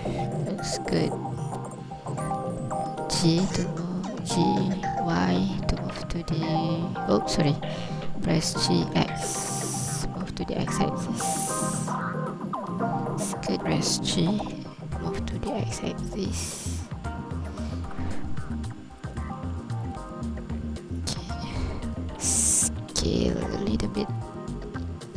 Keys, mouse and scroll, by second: 0.6 ctrl+click, 3.0 g, 4.3 y, 8.5 g, 9.0 x, 12.7 click, 13.6 n, 19.2 click, 19.9 ctrl+click, 23.0 s.